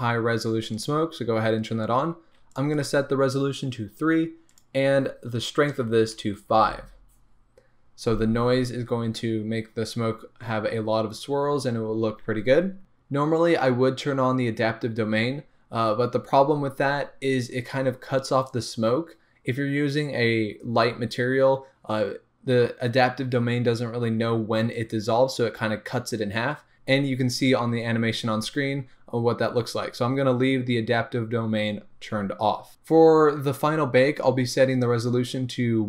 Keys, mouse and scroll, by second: 0.7 click, 1.2 scroll down 1, 2.5 click, 4.5-35.8 drag, 6.6 Return, 12.8-13.4 scroll down 1, 33.2-35.8 scroll up 2.